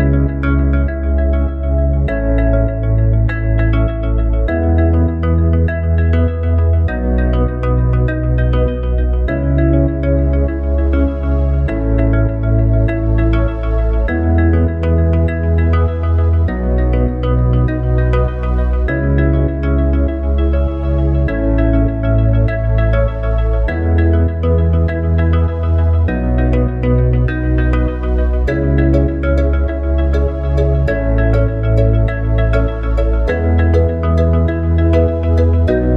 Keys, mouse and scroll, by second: 13.7-24.7 right drag, 24.7 click, 31.1 Tab.